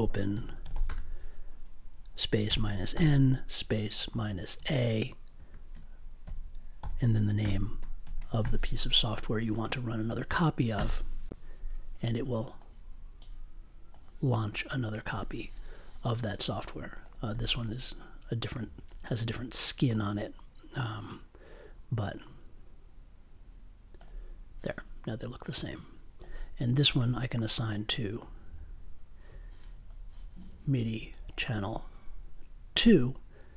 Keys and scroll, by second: 0.0-0.9 typing, 2.4-8.4 typing, 10.7 Return.